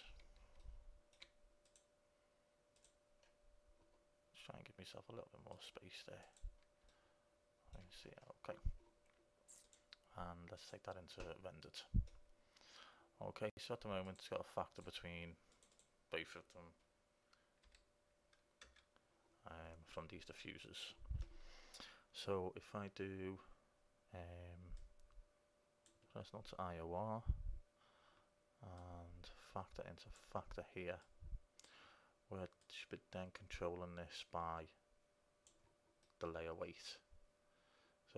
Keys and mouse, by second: 2.0 right click, 2.6-3.7 drag, 3.7-4.8 right drag, 6.3 click, 6.8 click, 7.1 middle click, 7.6 middle click, 9.0 middle click, 9.8-11.8 drag, 14.2-16.2 drag, 24.9-26.8 drag, 28.9-30.9 drag, 31.2-34.7 drag, 36.5 middle click.